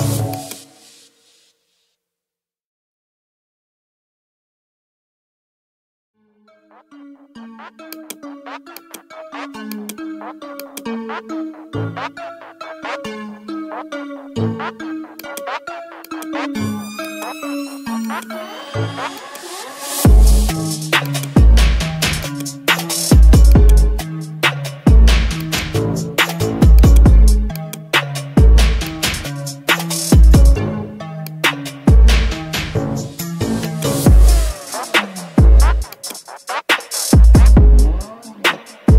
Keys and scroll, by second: 7.0 ctrl+d.